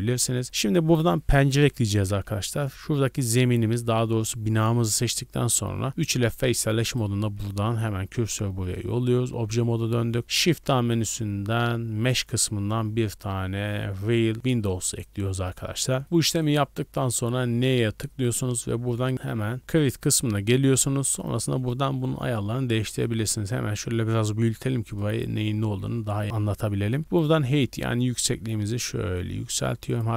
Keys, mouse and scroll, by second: 0.4 Tab, 0.4 right click, 3.0 scroll up 1, 3.2-3.6 scroll down 4, 4.3-5.9 scroll up 2, 5.9 3, 6.8 right click, 7.3 shift+s, 8.7 Tab, 9.1 a, 9.3 a, 10.2 middle click, 10.2 scroll up 1, 10.5 shift+a, 15.0 scroll up 1, 16.0 scroll down 2, 16.3-17.4 middle drag, 17.4 n, 18.4-19.6 drag, 22.4-22.8 scroll down 1, 22.8-25.0 shift+middle drag, 25.0-26.2 drag, 26.2 shift+middle click, 26.4-26.7 scroll up 1, 26.7 shift+middle click, 27.7-30.1 shift+drag.